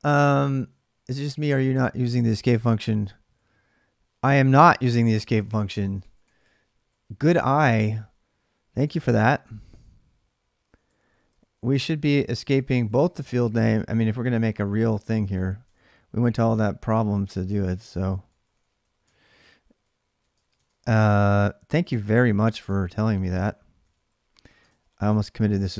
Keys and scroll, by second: 4.3 ctrl+[, 4.4-6.6 typing, 9.2 typing, 10.3-25.7 typing, 13.0 ctrl+[.